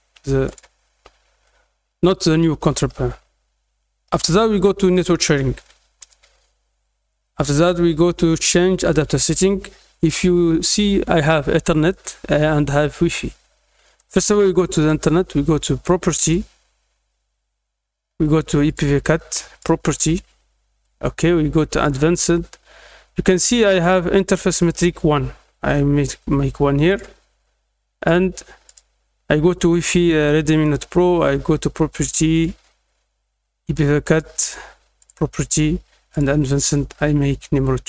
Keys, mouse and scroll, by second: 0.4 click, 2.5 middle click, 2.5 scroll down 2, 4.9 click, 8.3 click, 13.9 right click, 14.7 right click, 16.2 click, 18.6 click, 19.5 click, 20.8 middle click, 21.8 click, 26.8 click, 28.0 click, 28.6 click, 30.6 right click, 32.3 click, 34.1 click, 34.3 right click, 34.9 click, 36.1 click.